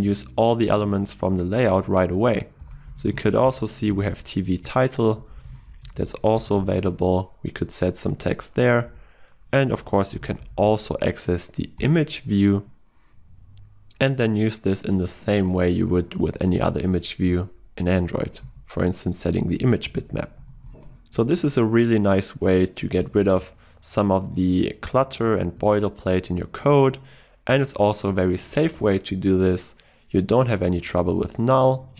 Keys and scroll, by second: 4.7 Return, 11.8 Return, 13.2 Return, 16.7 Return, 23.2 ctrl+alt+o.